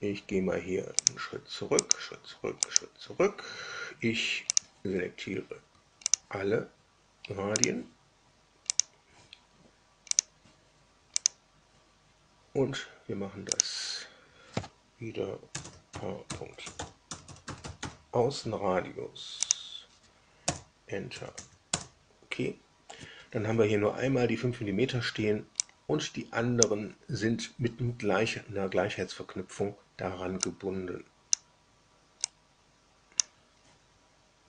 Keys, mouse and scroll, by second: 0.9 click, 1.7 click, 2.6 click, 4.5 click, 6.0 ctrl+click, 7.5 ctrl+click, 8.6 ctrl+click, 10.1 click, 11.2 click, 13.5 click, 15.2-18.2 typing, 19.4 click, 20.4 Return, 21.1 Tab, 21.3 Tab, 21.6 Return, 25.6-26.7 drag, 30.4-31.4 drag, 32.2-33.3 drag.